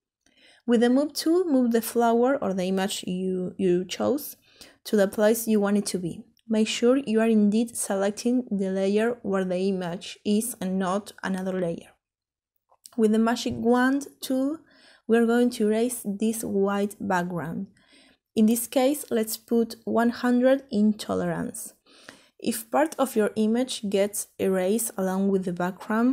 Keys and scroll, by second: 21.0-21.8 typing.